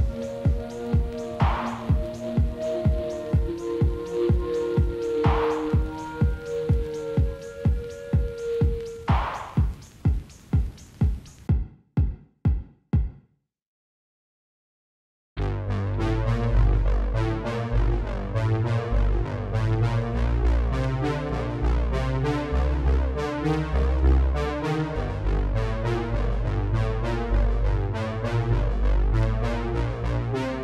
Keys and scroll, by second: 1.6 F4, 17.3 alt+w, 28.6 alt+w.